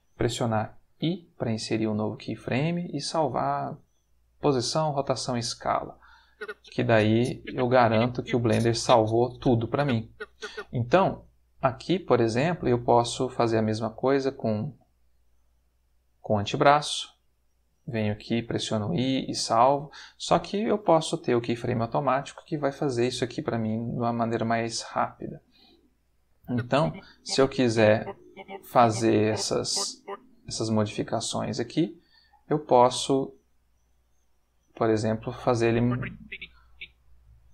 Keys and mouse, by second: 0.9 i, 4.9 click, 6.2-10.6 drag, 11.9 click, 12.6 r, 14.9 click, 18.4 i, 19.1 click, 21.0 click, 23.0 click, 23.9 r, 25.2 click, 26.4-29.8 drag, 30.6 click, 31.4 r, 32.4 click, 33.0 click, 33.7 r, 34.6 click, 35.5 click, 37.3 r.